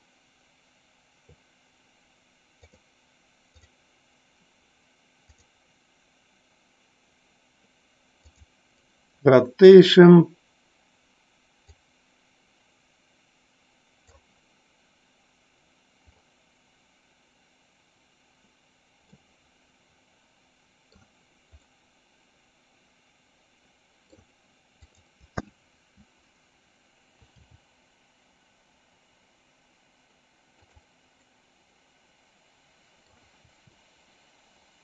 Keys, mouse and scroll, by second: 3.1 click, 4.4-6.4 drag, 12.4-15.1 drag, 20.1-22.3 middle drag, 22.5-24.9 middle drag, 25.4 click, 31.9-33.7 middle drag, 34.1 r.